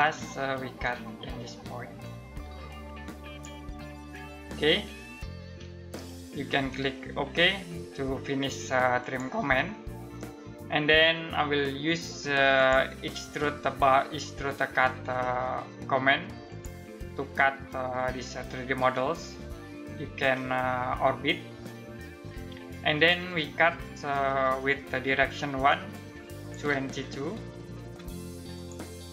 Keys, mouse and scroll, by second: 1.6 click, 3.5 scroll down 1, 3.8-5.4 scroll up 1, 5.6 middle click, 8.6 click, 12.1 click, 16.0 click, 19.9 click, 20.1 middle click, 25.2 click, 26.9-27.3 typing, 28.1 click.